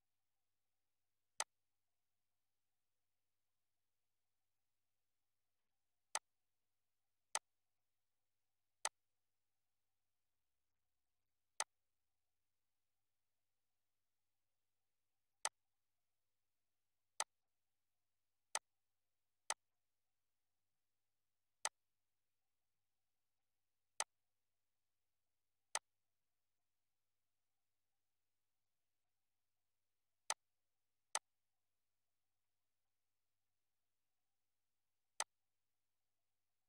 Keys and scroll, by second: 10.7 ctrl+z, 20.6 Up, 24.4 Down, 26.1 Up, 28.7 Down, 33.4 2.